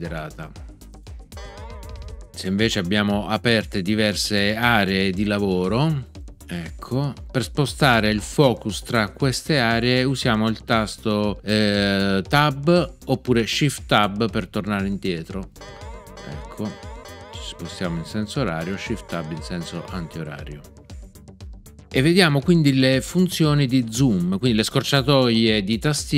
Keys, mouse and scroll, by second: 1.3 alt+w, 15.5 Tab.